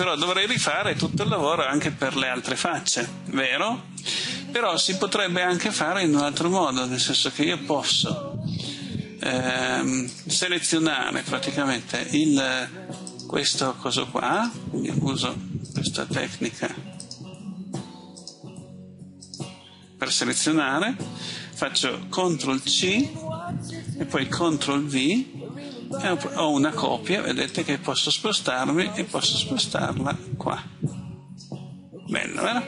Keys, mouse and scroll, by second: 22.8 ctrl+c, 25.6 ctrl+v, 27.6-31.9 drag.